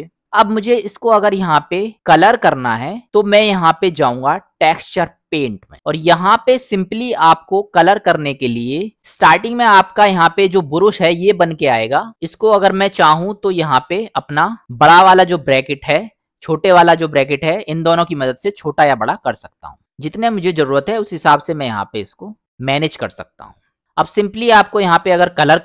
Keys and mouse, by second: 1.1-2.4 middle drag, 7.8 middle click, 12.1 [, 12.3 [, 16.8-21.2 typing, 24.1-25.6 middle drag.